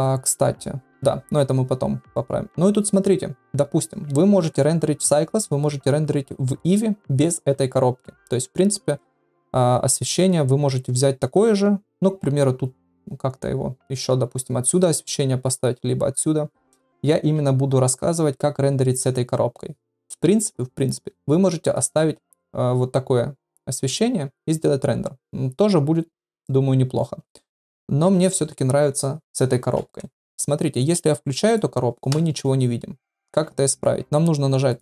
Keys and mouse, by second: 31.4 click, 34.7 click.